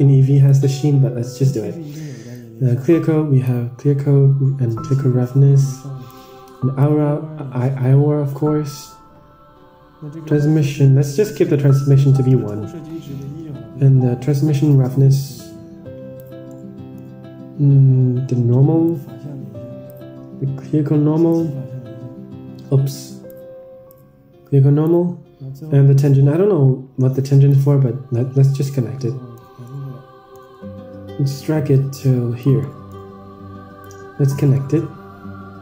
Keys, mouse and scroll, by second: 2.6-3.7 drag, 4.9-6.3 drag, 7.0-8.9 drag, 10.7 click, 15.0-16.5 drag, 16.6-17.2 middle drag, 18.8-20.0 drag, 21.6-23.2 drag, 23.8-25.0 drag, 26.2-27.7 drag, 28.2-29.1 scroll down 11, 29.1 middle click, 29.9-30.4 middle drag, 31.2-32.4 drag, 32.5-32.9 middle drag, 33.1-33.7 scroll up 5, 33.7-34.4 drag, 34.5 middle click, 35.0-35.4 scroll up 4.